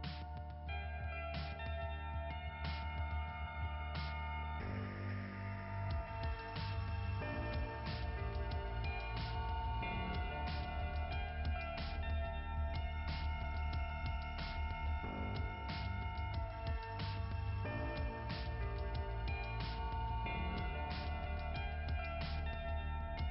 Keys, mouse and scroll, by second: 0.5 click, 2.6 click, 3.7 click, 4.2 click, 4.5 click, 4.8 click, 7.7 click, 9.1 click, 9.2 click, 13.9 click, 15.8 click, 17.1 click, 17.5 click, 19.3 click, 21.2 click, 22.1 scroll up 1, 22.2-22.7 scroll down 2.